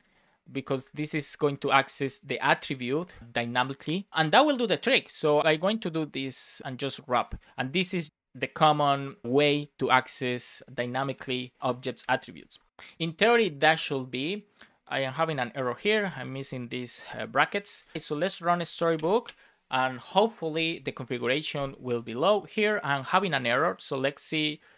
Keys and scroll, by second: 0.7 alt+Right, 1.9 Left, 5.4 super+c, 6.6 super+v, 7.2 super+c, 8.1 Left, 11.5 Down, 11.6 Left, 12.2 super+s, 16.0 Down, 16.2 Left, 17.7 super+s, 17.9 BackSpace, 18.1 space, 18.9 Return.